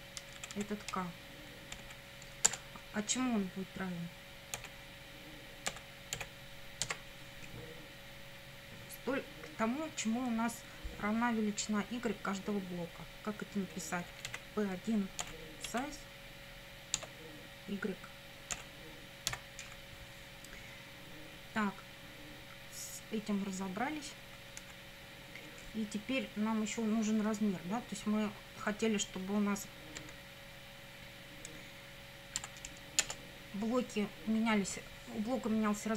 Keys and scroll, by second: 0.2 Right, 1.8 Right, 2.5 Return, 4.6 k, 5.7 =, 6.2 k, 13.8-15.7 typing, 17.0 Tab, 18.6 ., 19.3 y, 24.6 Up, 30.0 Up, 32.4 End, 33.0 Return.